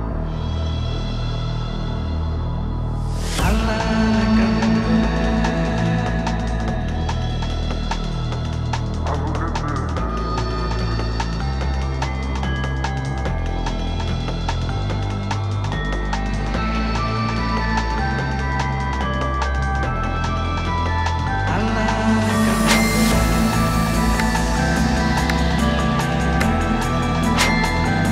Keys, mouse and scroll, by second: 1.0 1, 1.2 Return, 4.2-6.4 drag, 11.0 click, 14.3 click, 17.4 click, 18.4-19.1 typing, 20.7-21.7 click.